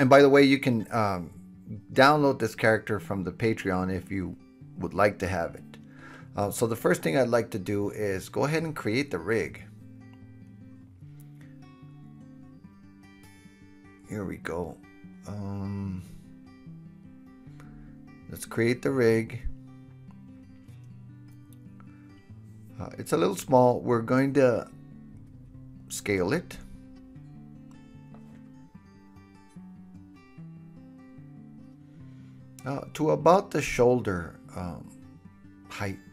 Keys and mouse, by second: 0.1 click, 0.1 middle click, 0.3 click, 0.5-2.9 middle drag, 2.9 right click, 5.8-15.0 middle drag, 24.9 KP_1, 27.0 alt+z, 28.6 alt+z, 30.2-36.1 drag, 31.4 s, 35.4 KP_3.